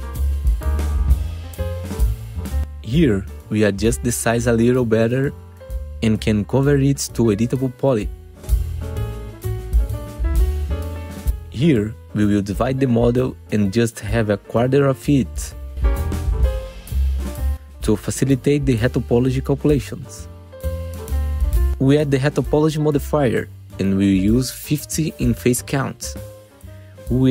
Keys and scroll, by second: 1.4 f, 8.7 F4, 10.1 ctrl+t, 11.7 1, 11.9 F4, 13.6 ctrl+shift+e, 14.7 2, 16.4 ctrl+c, 17.4 1, 18.4 Delete, 19.4 1, 19.5 F4, 20.1 1, 20.6 F4, 22.1 Delete, 24.6 BackSpace, 25.0 Return, 25.8 F4.